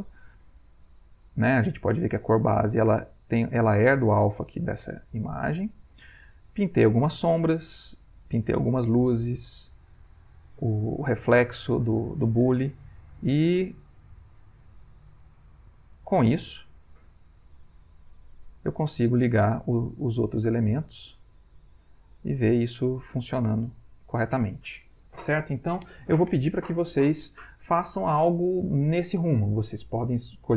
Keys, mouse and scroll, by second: 1.9 click, 5.2 click, 6.6 click, 7.9 click, 9.5 click, 13.2 click, 14.3 click, 15.9-17.1 drag, 17.6 click, 18.3 click, 19.2 click, 19.6 click, 20.4 click, 21.5-22.6 drag, 23.3 middle click, 23.9 ctrl+middle click, 24.3-27.0 ctrl+scroll up 1, 27.0-28.4 scroll up 1.